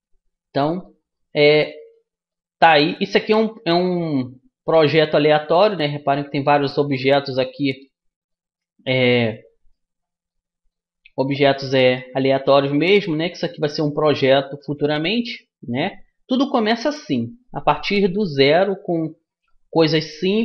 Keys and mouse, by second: 5.6-8.2 right drag, 8.2-9.9 middle drag, 17.2-20.4 right drag.